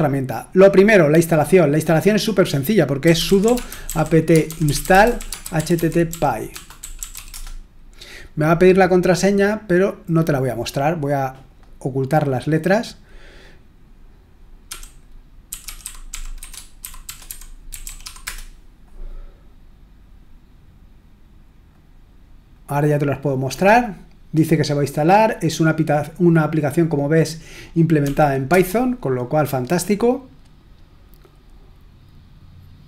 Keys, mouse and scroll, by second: 0.7-1.3 scroll up 2, 1.3 click, 2.3 click, 2.8-7.6 typing, 10.2 click, 11.5-14.3 drag, 23.3-25.0 drag, 28.0 typing, 28.5 Return.